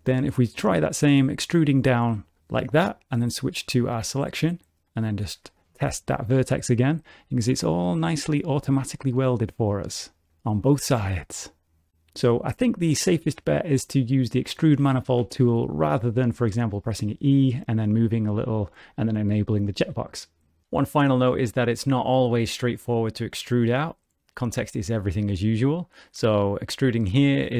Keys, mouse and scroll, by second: 1.4 click, 3.5 click, 4.7 click, 5.5 1, 5.7 click, 6.1 g, 7.8 middle click, 9.3 click, 9.5 g, 10.7 middle click, 16.7 middle click, 17.7 shift+middle click, 22.9 middle click, 24.0 click, 24.5 shift+middle click, 25.2 middle click, 26.1 e, 27.2 middle click.